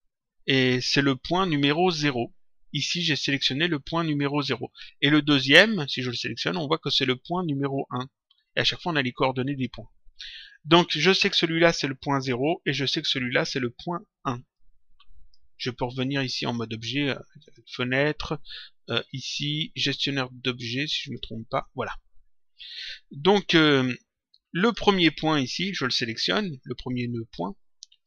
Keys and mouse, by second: 5.5 click, 11.1 click, 12.8 click, 14.5 click, 17.3 click, 20.9 click, 23.8 click, 25.6 click, 26.9 click.